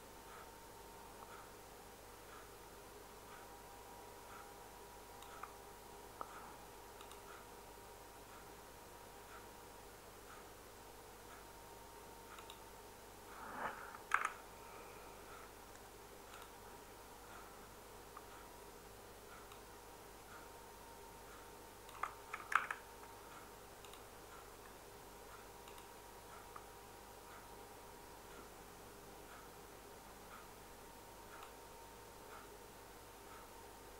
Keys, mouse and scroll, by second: 14.1 ctrl+z, 16.4 ctrl+z, 22.5 ctrl+z.